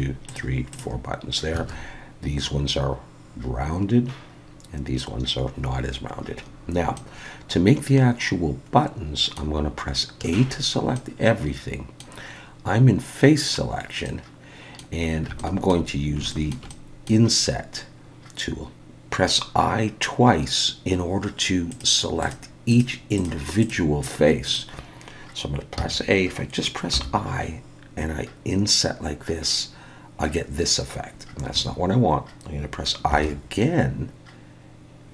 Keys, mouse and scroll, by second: 0.3 click, 0.7 click, 1.6 alt+a, 7.0 middle click, 10.2 a, 10.9 middle click, 14.2 middle click, 15.0 scroll up 2, 15.4 shift+middle click, 15.9-16.2 scroll down 1, 16.3 shift+middle click, 16.7 middle click, 17.9-18.3 scroll up 1, 21.7 click, 22.2 click, 22.7 click, 23.1 click, 23.6 click, 24.0 click, 24.5 click, 25.8 a, 26.9 i, 33.1 i.